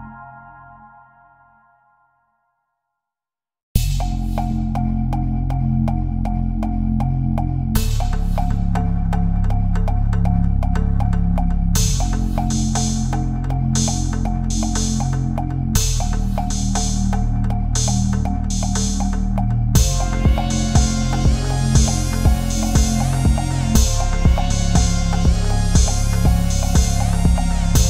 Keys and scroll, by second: 4.2 ctrl+=, 5.0 space, 5.7 Right, 10.0 Down, 10.1 Left, 10.1 Down, 10.3 Right, 14.1 Up, 14.4 Left, 14.7 Down, 14.9 Up, 15.0 Down, 20.7 Delete, 21.2 BackSpace, 21.8 ctrl+z, 23.1 Left, 23.4 Up.